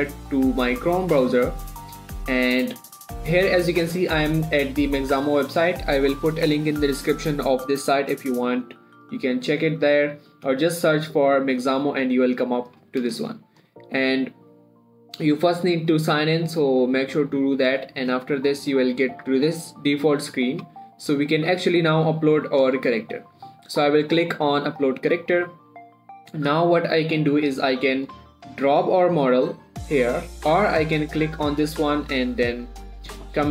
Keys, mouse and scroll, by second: 2.8 typing, 9.8 click, 16.1 click, 21.7 click, 25.0 click, 28.2 click, 31.1 click, 33.4 scroll down 1.